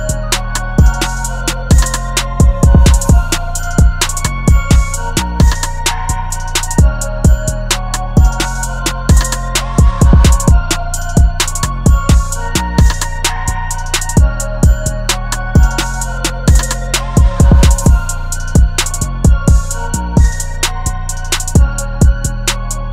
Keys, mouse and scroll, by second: 6.8 ctrl+t, 11.7 alt+shift+click, 15.4 Return, 17.3 Down, 19.0 Down, 19.2 Down, 19.3 Down.